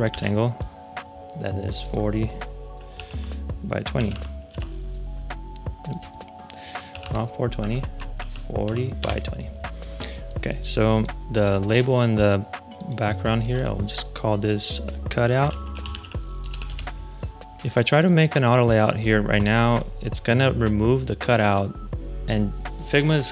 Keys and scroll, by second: 0.0 r, 2.7-4.5 typing, 6.6-8.5 typing, 7.5 Tab, 8.9 Return, 15.0-16.9 typing.